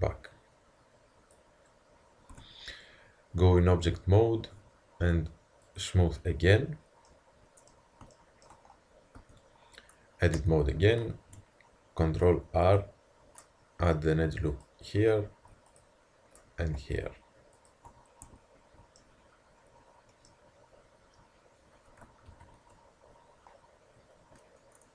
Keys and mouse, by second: 2.3 Tab, 4.5 t, 5.6 click, 6.5 t, 7.1-7.7 middle drag, 9.2 Tab, 9.9 middle click, 12.0 ctrl+r, 15.3 ctrl+r, 18.3 Tab, 19.9 middle click, 20.8-21.8 middle drag, 22.3 ctrl+KP_3.